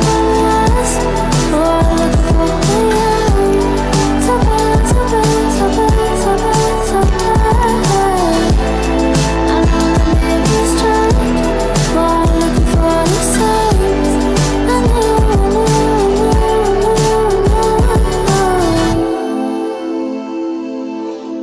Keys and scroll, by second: 2.7 Tab.